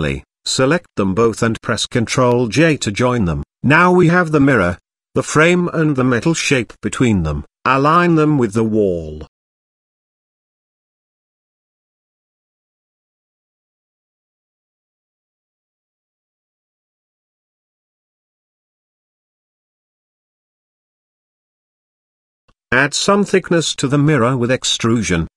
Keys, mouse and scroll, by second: 0.6 ctrl+j, 1.5-1.8 middle drag, 2.7 middle click, 3.3 shift+middle drag, 3.7 click, 4.3-4.9 middle drag, 5.1 shift+middle click, 5.6-6.0 middle drag, 7.1-8.4 middle drag, 8.6-9.1 middle drag, 9.5 click, 10.5 click, 11.7 middle click, 12.6 g, 16.5 middle drag, 16.7 shift+middle drag, 17.4 middle click, 18.4 g, 23.0 Tab, 24.2 click, 24.5 click.